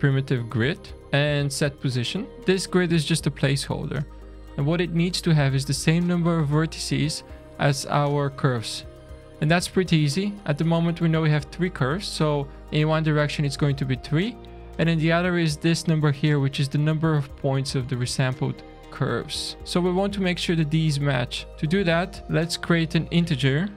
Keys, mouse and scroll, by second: 0.9 middle click, 0.9 click, 1.1 shift+a, 2.3 click, 3.6-3.9 scroll up 3, 6.5 middle click, 6.9-7.4 scroll down 4, 10.1-10.5 scroll up 3, 12.1 scroll up 3, 14.7 middle click, 17.6-18.7 middle drag, 18.7-19.3 scroll down 3, 19.6-20.6 middle drag, 21.5 middle click, 22.2 click.